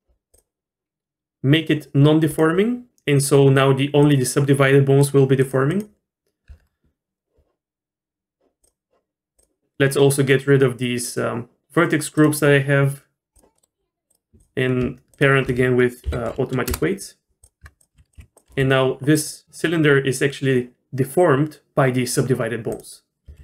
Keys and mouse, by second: 2.3 click, 5.4 click, 5.7 click, 6.5 Tab, 11.2-11.6 drag, 12.2-13.4 drag, 13.6 middle drag, 14.1 click, 14.4 click, 15.1 shift+click, 16.0 ctrl+p, 17.4 click, 17.6 Tab, 17.9 r, 18.4 g, 18.5 r, 22.7 click, 23.3 r.